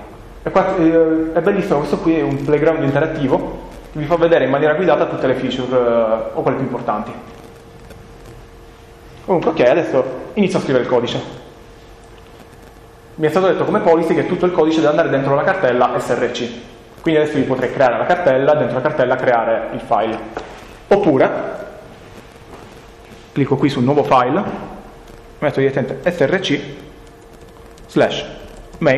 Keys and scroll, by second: 25.8 s, 28.3-28.9 typing.